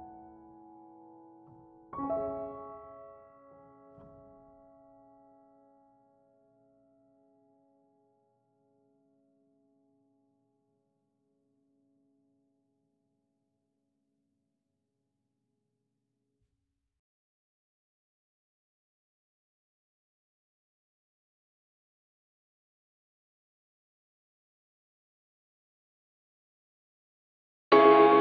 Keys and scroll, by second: 2.5 ctrl+8.